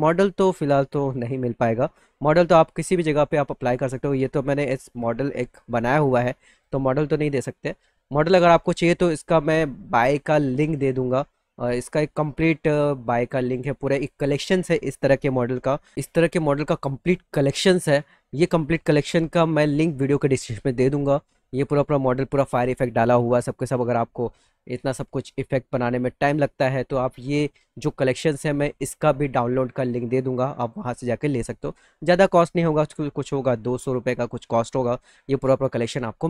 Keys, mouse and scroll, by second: 6.3 click, 7.1 click, 16.5 middle click, 16.5-17.1 scroll down 3, 16.8 middle click, 17.1 middle click, 18.5 middle click, 18.5-18.9 scroll down 2, 18.8 middle click, 20.7 click.